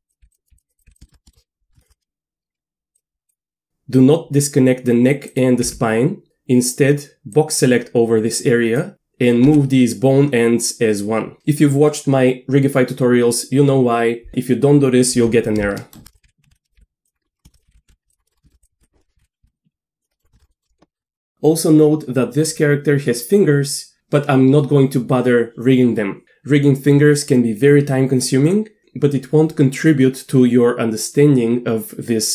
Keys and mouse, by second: 0.0-0.9 typing, 0.4 click, 0.7 click, 1.0 shift+click, 1.3 shift+click, 1.8 shift+click, 5.7 g, 7.3-8.8 drag, 8.9 g, 9.4 g, 15.9 shift+click, 16.2-19.2 typing, 17.4 shift+middle click, 18.2 middle click, 18.4 shift+middle click, 18.6 click, 20.1 middle click, 20.3 shift+middle click, 21.0 Tab, 21.1 shift+middle click, 21.3 middle click.